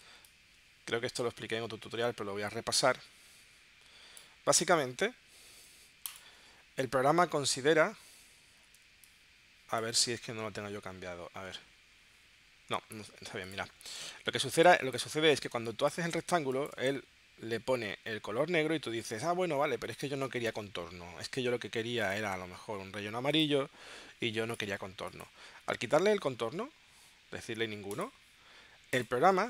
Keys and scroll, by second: 8.8 space, 14.6 space.